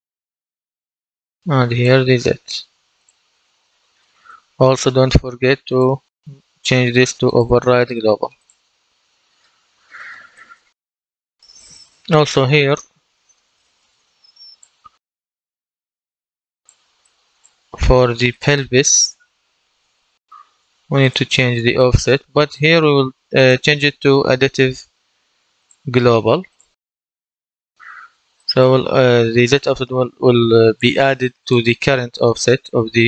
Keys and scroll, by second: 13.1 ctrl+d, 18.7-20.2 typing.